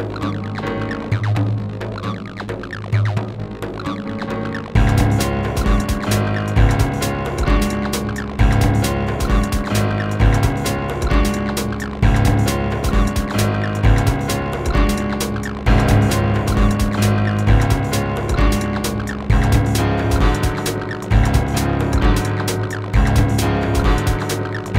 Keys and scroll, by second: 4.1 space, 8.4 space, 11.4 space, 15.2 q, 22.1 w.